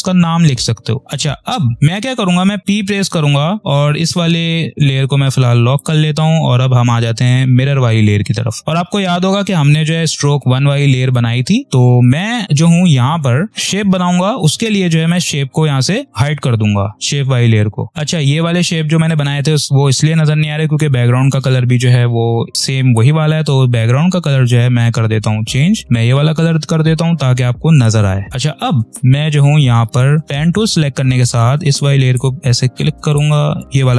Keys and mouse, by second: 4.7 click, 8.6 space, 9.6 click, 11.6 space, 13.5 click, 15.0 click, 17.4 space, 18.4 click, 18.8 space, 21.4 v, 22.8 click, 28.8 ctrl+p, 29.1 ctrl+=, 29.9 click, 30.2 space, 31.6 ctrl+click.